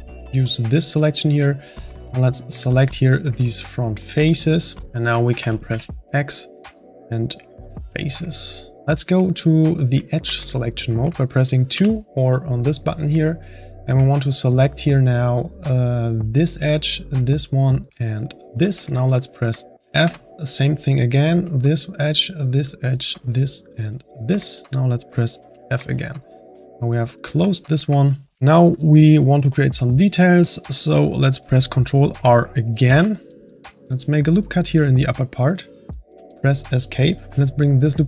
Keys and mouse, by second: 0.9-2.2 middle drag, 2.2 click, 2.6-3.8 middle drag, 3.8 shift+click, 4.4-5.7 middle drag, 5.7 x, 8.4-11.7 middle drag, 11.7 2, 13.4-16.3 middle drag, 16.3-19.1 drag, 19.1 middle click, 20.0 f, 20.4 middle click, 20.5-24.5 drag, 24.5 middle click, 25.5 f, 26.0-32.3 middle drag, 32.8 ctrl+r, 37.3-38.0 drag.